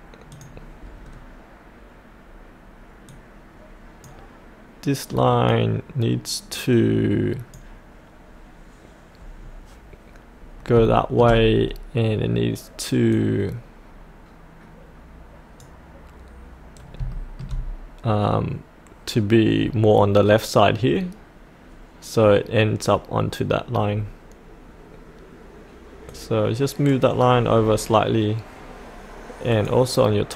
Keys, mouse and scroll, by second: 1.0-3.1 scroll down 1, 3.1-8.4 drag, 9.4-10.8 scroll up 1, 10.9 shift+middle click, 11.6-13.1 scroll down 1, 13.1-14.5 drag, 16.5 click, 17.1 shift+middle click, 19.6-26.1 scroll up 1, 26.1 click, 27.5-29.5 scroll down 1, 29.5-30.3 drag.